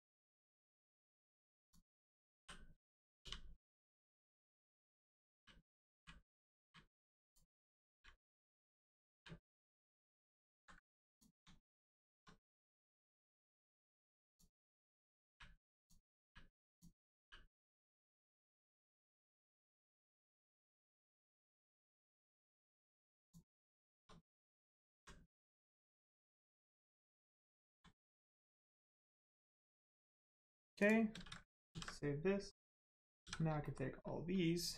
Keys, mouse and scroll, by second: 0.3 middle click, 1.6 click, 2.3 l, 3.7 click, 5.3 u, 5.6 click, 5.9 u, 6.3 click, 6.5 u, 7.2 click, 7.5 scroll up 1, 7.8 u, 8.7 click, 9.1 u, 9.9 shift+middle click, 10.4 ctrl+middle click, 10.5 ctrl+z, 11.1 click, 11.5 shift+middle click, 12.7 scroll down 1, 14.2 click, 15.7 click, 16.2 u, 16.7 click, 17.1 u, 17.7 scroll up 1, 18.5 click, 19.7 middle click, 22.7 middle click, 23.2 shift+click, 24.9 u, 25.5 scroll down 1, 27.4 shift+middle click, 28.2 scroll down 1, 28.6 shift+middle click, 29.3 scroll down 1, 30.0 middle click, 30.7 click, 31.7 ctrl+s, 32.5 middle click, 32.7 scroll up 1, 33.2 a, 33.6 shift+middle click.